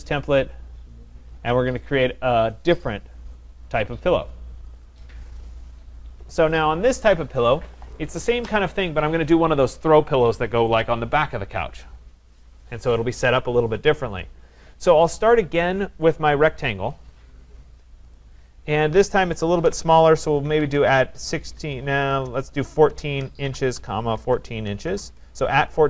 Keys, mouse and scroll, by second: 4.8 click, 4.9 click, 5.7-6.2 scroll, 6.2 scroll, 16.9 click, 18.2 click, 19.6-20.8 typing, 22.2-24.9 typing.